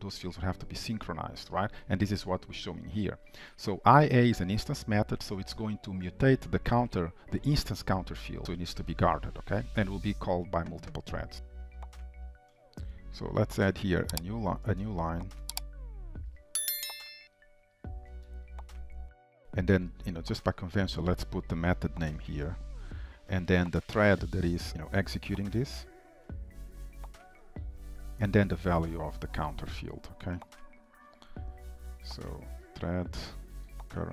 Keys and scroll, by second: 12.3 Return, 33.4 Return.